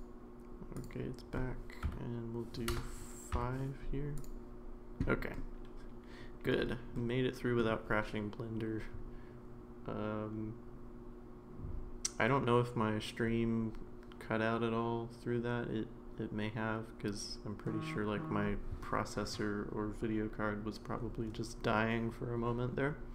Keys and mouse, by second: 0.7-4.2 drag, 5.3-6.5 middle drag, 6.9-7.6 middle drag.